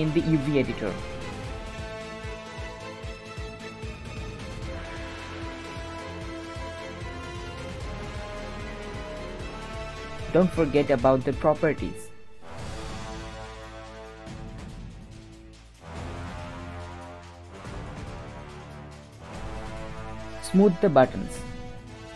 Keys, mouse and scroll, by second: 0.0 click, 0.6 middle click, 1.5 scroll up 1, 1.7-5.4 typing, 7.2 KP_7, 7.6 scroll up 1, 7.8 shift+middle click, 8.1 g.